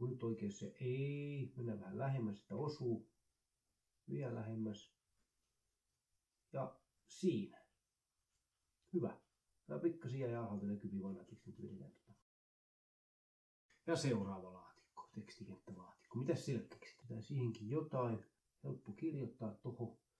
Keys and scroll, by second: 0.5 ctrl+z, 2.3 ctrl+z, 13.1 ctrl+s, 14.9-17.4 typing.